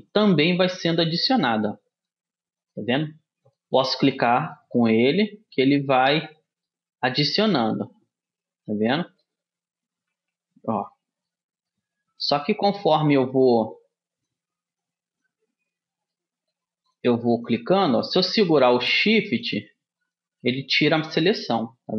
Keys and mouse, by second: 6.2-8.8 middle drag, 10.2 c, 21.2 middle click.